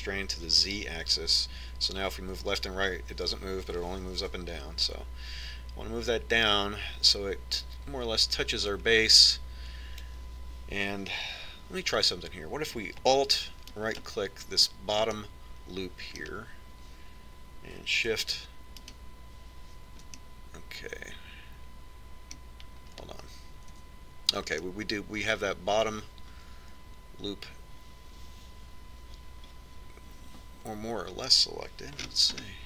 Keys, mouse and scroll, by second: 15.3-16.8 right drag, 16.8-18.6 middle drag, 20.5-22.1 right drag, 22.1-23.4 middle drag, 24.3-25.4 middle drag, 25.4 z.